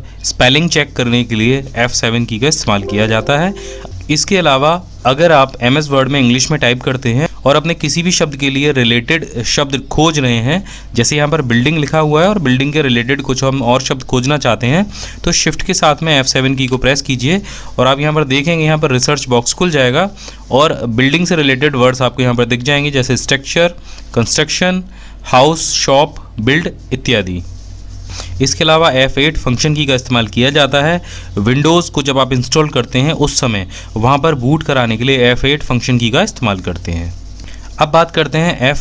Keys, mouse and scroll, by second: 5.5-6.2 typing, 8.1-8.9 typing, 28.1 f.